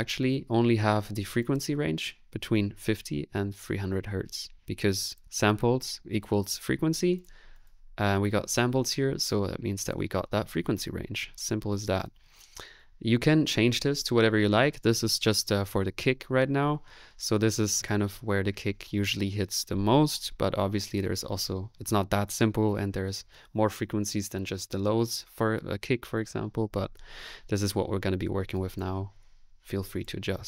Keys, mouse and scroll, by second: 12.3 middle click, 12.7 click, 13.3-14.7 middle drag, 17.8 click, 18.0 space.